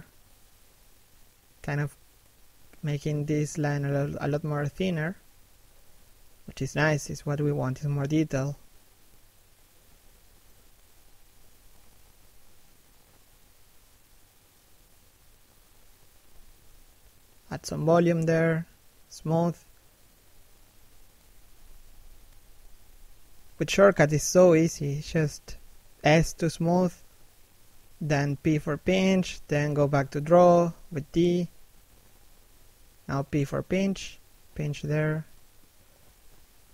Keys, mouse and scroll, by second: 0.1 click, 2.5-3.0 scroll down 1, 3.0 middle click, 3.3 shift+middle click, 3.7 middle click, 4.0-4.3 scroll up 1, 4.3 click, 8.1 shift+middle click, 8.8 scroll up 1, 9.0 middle click, 9.5 shift+middle click, 9.9 scroll up 1, 10.1 click, 10.9 shift+middle click, 11.3 click, 12.6 scroll down 1, 14.0 scroll up 1, 14.2 d, 14.6 click, 15.3 middle click, 16.1 s, 16.3 click, 17.5 shift+middle click, 18.0 click, 18.8 scroll down 1, 18.9 middle click, 19.6-20.2 scroll up 1, 20.2 d, 20.3-20.7 scroll up 1, 20.7 f, 21.0 click, 21.1 shift+middle click, 21.6 shift+click, 22.2 middle click, 23.1 shift+click, 23.8 shift+middle click, 24.4 shift+click, 25.3 shift+click, 25.9 shift+middle click, 26.6 shift+click, 27.7 shift+click, 28.6 middle click, 29.6 shift+middle click, 30.1 scroll down 1, 30.6 p, 31.0 scroll up 1, 31.2 click, 36.4 shift+middle click.